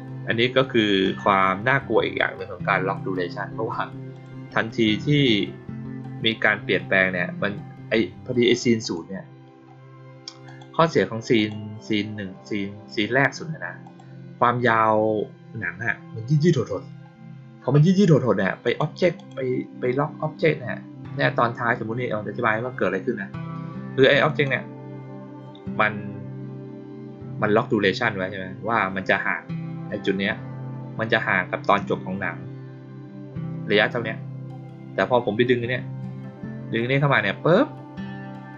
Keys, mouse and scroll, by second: 0.9 click, 4.1 click, 4.6 click, 8.7 click, 10.4 click, 11.3 click, 13.8 click, 18.6 click, 19.1 click, 24.2 click.